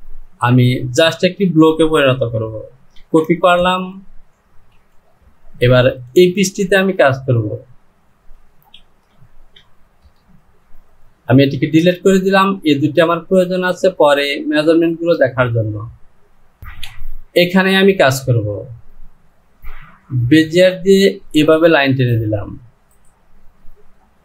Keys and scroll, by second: 2.9 ctrl+c, 8.8 shift+z, 10.0 shift+z, 16.6 Home.